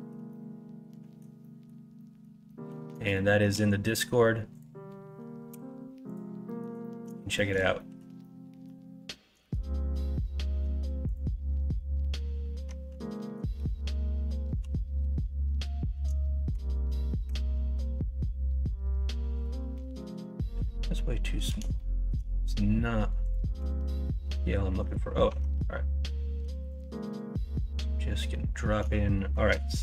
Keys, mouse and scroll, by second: 0.3 middle click, 1.4 middle click, 2.0 middle click, 2.4 middle click, 3.1 shift+middle click, 5.5 x, 6.4 middle click, 6.8 middle click, 7.3 middle click, 7.7 middle click, 8.2 middle click, 9.4 shift+a, 13.2 middle click, 14.5 KP_1, 14.9 KP_3, 16.2 shift+middle click, 17.2 g, 21.7 shift+middle click, 23.5 x, 25.2 Tab, 26.4 x, 29.1 shift+middle click.